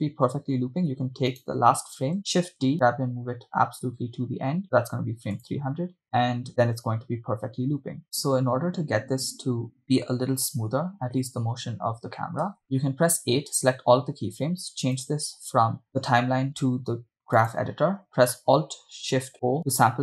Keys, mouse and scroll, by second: 1.3 right click, 2.4 shift+d, 5.8 click, 6.6 shift+space, 12.6 shift+space, 13.4 a.